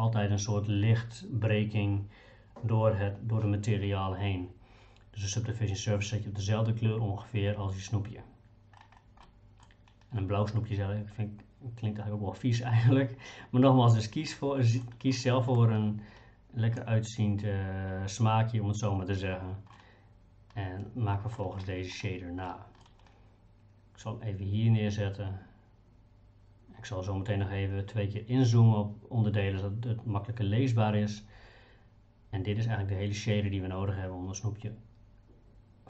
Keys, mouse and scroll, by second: 9.2 middle click, 14.3 middle click, 15.1 middle click, 19.8-21.4 middle drag, 22.5 middle click.